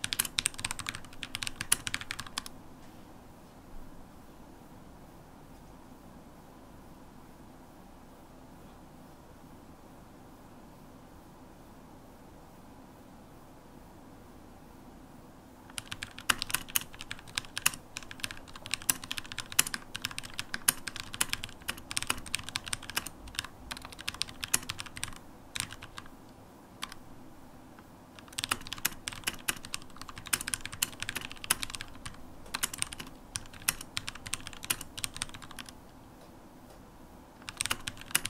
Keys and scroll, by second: 4.6 super+h, 17.8-19.0 typing, 28.0 super+h, 30.1-32.7 typing, 34.8 super+h, 37.4 shift+super+x.